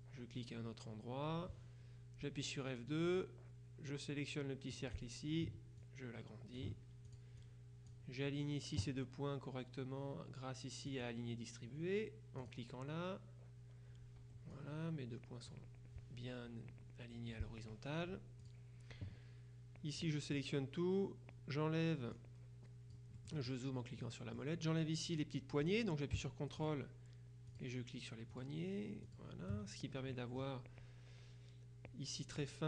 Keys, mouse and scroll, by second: 2.3 F2, 3.1 click, 4.8 click, 5.9-7.7 ctrl+drag, 11.0 click, 12.5 click, 14.3 F1, 14.6 click, 17.2 F2, 18.5 click, 20.1 click, 22.2-24.0 drag, 24.1 click, 26.7 ctrl+click, 27.6 click, 28.4 click, 29.1 click, 30.2 click.